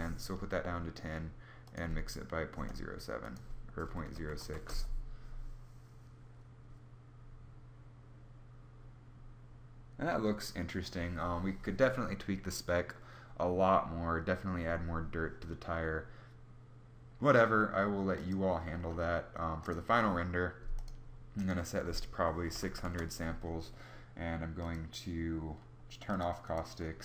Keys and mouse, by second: 22.1 0, 22.4 0.